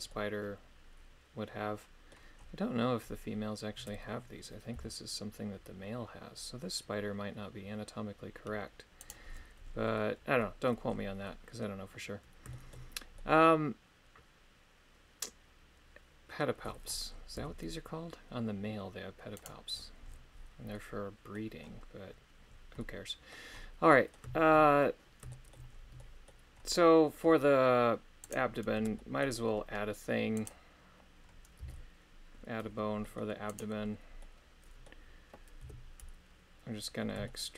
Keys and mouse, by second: 0.2-2.1 middle drag, 5.1 g, 10.4 middle click, 11.3 middle click, 12.5 shift+middle click, 13.2-16.5 middle drag, 17.6 g, 20.8 middle click, 22.8 middle click, 23.9 middle click, 25.3 shift+middle click, 26.0 middle click, 28.3 right click, 28.7 Tab, 29.0 middle click, 30.6 right click, 31.9 c, 34.2 middle click, 35.8 KP_3, 37.3 shift+middle click.